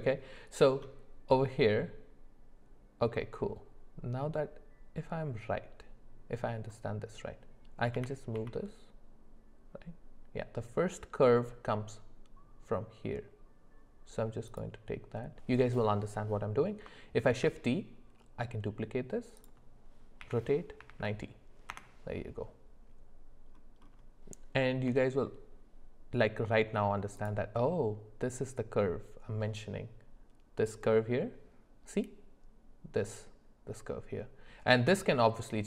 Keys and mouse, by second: 8.0 g, 17.3 shift+d, 20.2 r, 24.9 g.